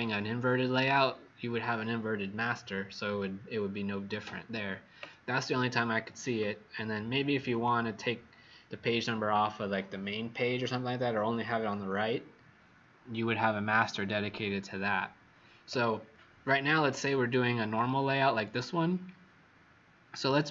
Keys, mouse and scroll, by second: 5.6 Escape, 7.4 click, 16.6-17.7 scroll down 11, 18.5 scroll up 1.